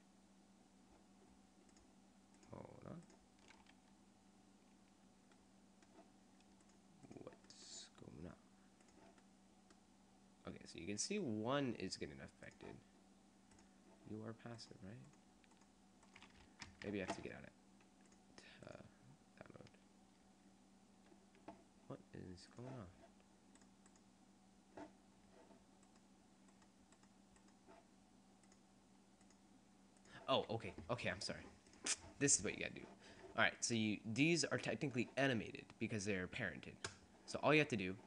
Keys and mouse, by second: 2.7-5.1 drag, 5.6 click, 6.7 click, 7.2 middle click, 7.7 middle click, 9.5-11.1 drag, 11.5 click, 12.5-14.7 drag, 14.7 middle click, 15.7 right click, 16.7 ctrl+Tab, 22.6-23.8 middle drag, 23.8 right click, 26.0-27.2 right drag, 27.4-28.6 right drag, 28.6 middle click, 29.4-32.7 drag, 33.7 right click, 35.1 click, 35.4 middle click.